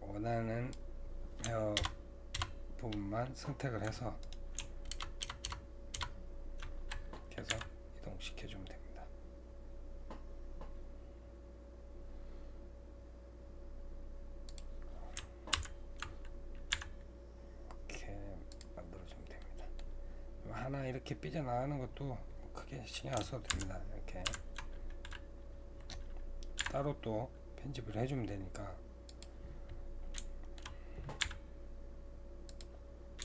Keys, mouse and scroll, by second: 4.9 ctrl+KP_Add, 5.2 ctrl+KP_Add, 7.5 g, 15.5 ctrl+KP_Subtract, 16.4-16.7 scroll down 2, 16.7 g, 18.9-19.4 scroll up 3, 19.4-22.4 middle drag, 23.5 ctrl+KP_Subtract, 24.2 ctrl+KP_Subtract, 26.6 g, 29.7-30.2 scroll down 1, 30.2-31.2 middle drag, 31.2 g.